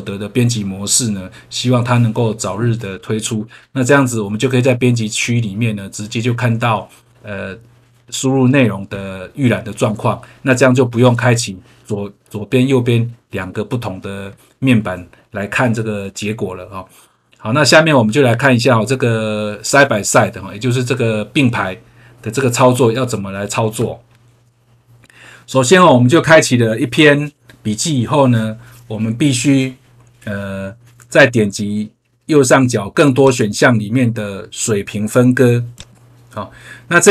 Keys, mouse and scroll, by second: 22.4 scroll down 1, 33.2 click, 35.7 click.